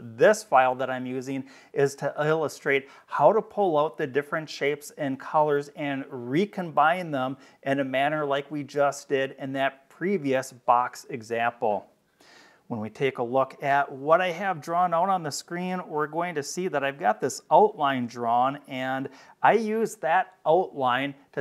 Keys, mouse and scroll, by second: 16.1 click.